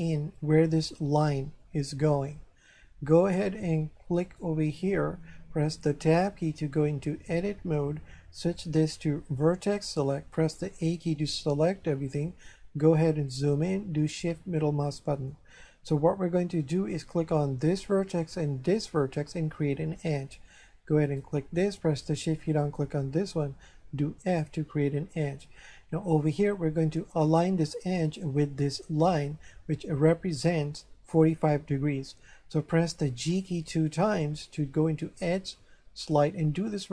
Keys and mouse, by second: 4.2 right click, 6.2 Tab, 9.4 click, 10.8 a, 14.3 shift+middle click, 21.1 right click, 22.6 shift+right click, 24.3 f, 33.9 g.